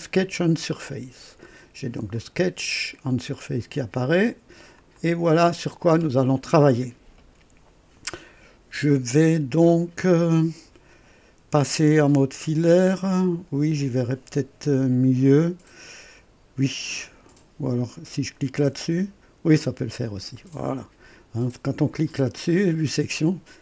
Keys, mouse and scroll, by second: 0.2 click, 2.1 click, 4.7 click, 18.6 click, 19.8-20.1 scroll up 1, 20.4 right click.